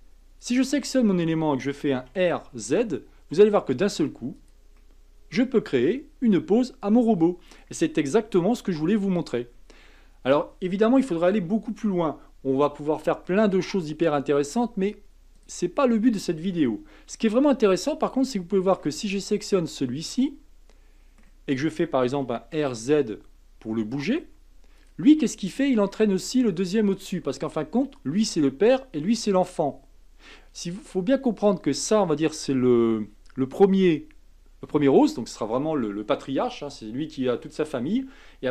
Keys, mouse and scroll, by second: 0.4 click, 2.0 r, 4.8-7.8 middle drag, 13.3-15.3 middle drag, 15.3 click, 17.8-22.1 middle drag, 22.1 r, 25.2-25.9 middle drag, 25.9-28.9 scroll up 1, 32.2 click.